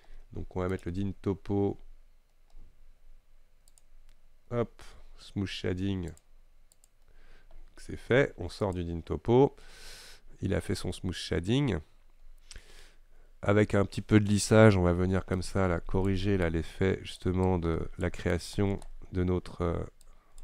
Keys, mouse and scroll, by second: 6.4 click, 7.0 click, 9.9-11.1 middle drag, 11.1-11.7 scroll up 5, 11.7-15.2 scroll down 3, 15.4-20.4 shift+drag.